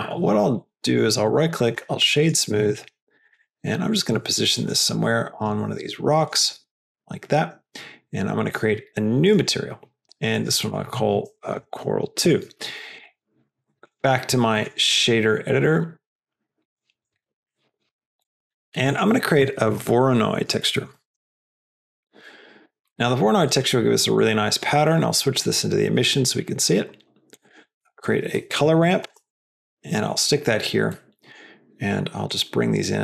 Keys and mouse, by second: 0.1 g, 0.8 right click, 1.7 g, 2.5 s, 3.3 g, 4.0 s, 5.7 s, 6.3 g, 8.4 click, 9.3 click, 10.3 click, 10.5-12.7 drag, 12.9 click, 13.7 click, 16.0 click, 17.1 middle click, 17.5 middle click, 17.8 middle click, 18.3 middle click, 18.7 shift+a, 20.7 BackSpace, 21.1 BackSpace, 22.9 middle click, 23.3 click, 24.1-25.2 drag, 27.2 click, 27.7 shift+a, 30.8 middle click, 32.2-33.0 drag.